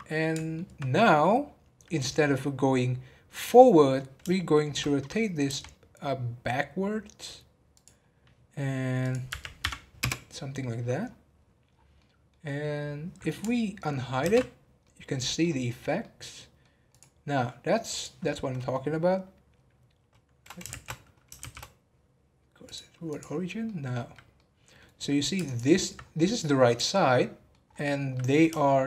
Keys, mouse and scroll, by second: 1.0 scroll up 4, 4.3-5.4 shift+middle drag, 5.4 r, 9.0-11.0 drag, 11.0-11.5 scroll down 10, 11.9-12.6 middle drag, 12.6 scroll up 1, 14.2 alt+h, 14.8 middle click, 15.4 scroll up 4, 16.0 middle click, 16.9 click, 17.9-19.5 drag, 19.5 scroll up 1, 20.6 shift+a, 23.0 click, 23.6-25.4 middle drag, 25.4 alt+click, 25.9 scroll down 2, 26.2-27.7 middle drag, 27.7-28.1 scroll up 2, 28.1 middle click.